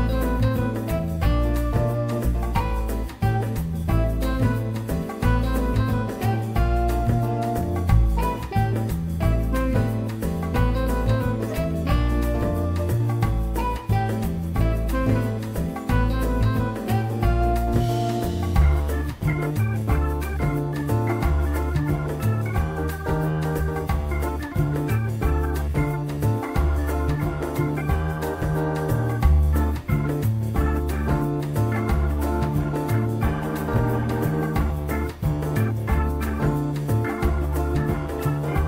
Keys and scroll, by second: 1.8 alt+1, 2.9 F3, 3.8 F3, 9.0 F4, 22.0 F4, 27.0 F3, 27.8 F4, 34.8 F4, 38.5 F4.